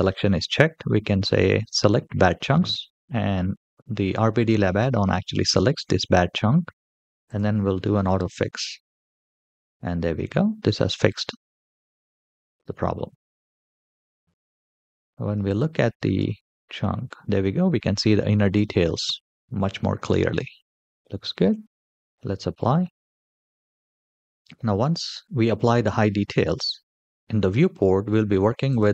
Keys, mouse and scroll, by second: 1.3 click, 7.0 click, 9.5-10.1 scroll up 4, 10.9-12.1 middle drag, 12.9-13.3 shift+middle drag, 13.5 scroll up 1, 13.6-14.6 middle drag, 15.2 click, 15.9 g, 20.9 shift+middle click, 21.9 click, 21.9 scroll down 4, 23.6 click, 24.3 middle click, 26.4-27.3 scroll up 4, 27.3-28.1 middle drag, 28.4 click.